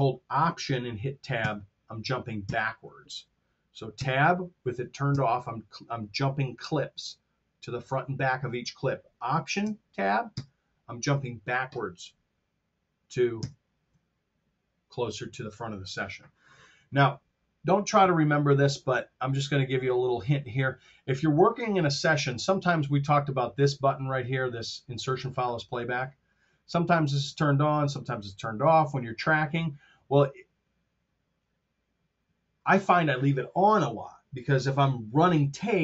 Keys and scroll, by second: 1.2 alt+Tab, 2.3 alt+Tab, 3.9 Tab, 10.2 alt+Tab, 13.2 alt+Tab.